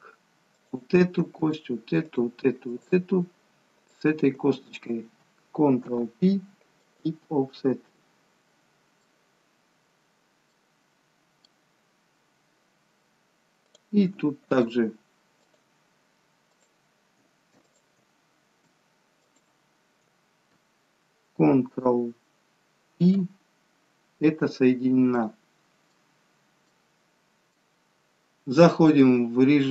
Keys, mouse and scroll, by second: 0.6 click, 1.5 shift+click, 2.1 click, 3.5 shift+click, 5.8 ctrl+p, 7.8 middle click, 9.5-10.6 scroll down 1, 10.6 middle click, 10.6 scroll down 1, 11.9-12.5 scroll up 1, 12.5 scroll down 1, 13.7 click, 14.5 shift+click, 15.6 click, 17.8 click, 19.3 click, 25.1 middle click, 26.2 scroll down 1, 26.6 middle click.